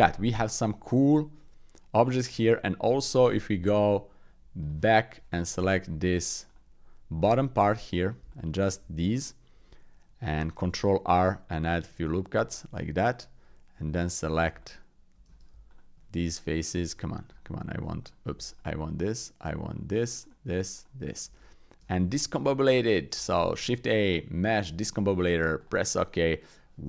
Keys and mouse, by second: 0.2 middle click, 0.8-1.9 middle drag, 2.1 middle click, 4.6 click, 5.2 Tab, 6.0 Tab, 6.4 click, 7.2 Tab, 8.3 alt+click, 9.1 click, 10.6 ctrl+r, 13.8 Tab, 14.6 alt+click, 15.2 Tab, 15.6 alt+click, 16.4 alt+shift+click, 16.9 alt+shift+click, 18.0 click, 18.5 alt+shift+click, 19.4 alt+shift+click, 19.7 alt+shift+click, 20.2 alt+shift+click, 20.8 alt+shift+click, 21.8 Tab, 22.2 ctrl+a, 23.5 shift+a.